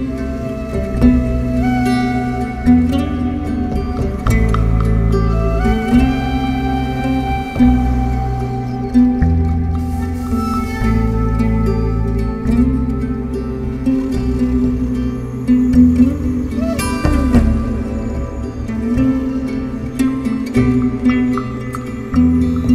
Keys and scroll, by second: 3.1 7, 8.2 3, 8.7 4, 9.2 3, 12.0 ctrl+z, 14.7 ctrl+z, 17.3 ctrl+z, 19.9 7, 22.6 ctrl+z.